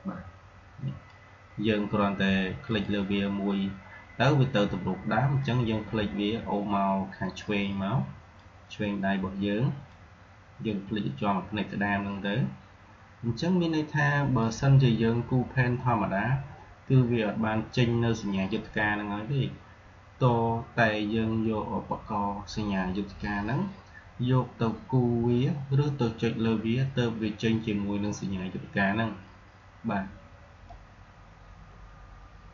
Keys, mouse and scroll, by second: 5.3-16.8 drag, 30.6-32.5 drag.